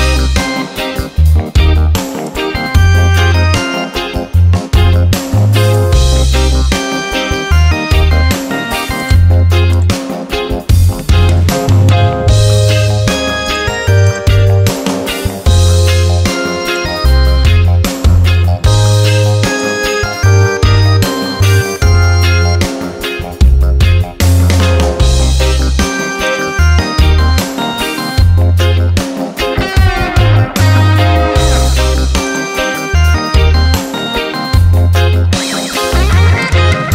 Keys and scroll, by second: 7.3 ctrl+a, 11.0 ctrl+d, 28.3 ctrl+j, 30.0 ctrl+t, 34.9 Return.